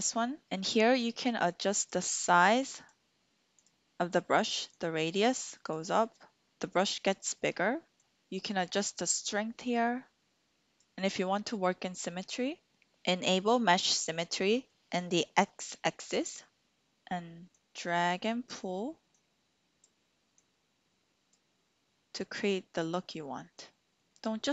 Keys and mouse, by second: 2.9 click, 4.8 click, 8.8-10.8 drag, 16.6 ctrl+z, 17.5 click, 19.1 click, 20.4 click, 22.2 click, 23.6 click.